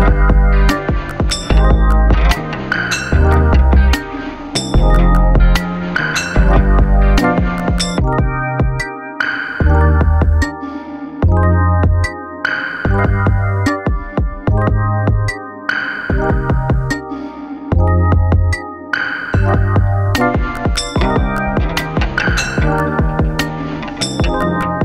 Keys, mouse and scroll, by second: 0.0 right click, 2.5 click, 6.4 click, 8.7-14.8 drag, 16.8 ctrl+z, 18.8 click.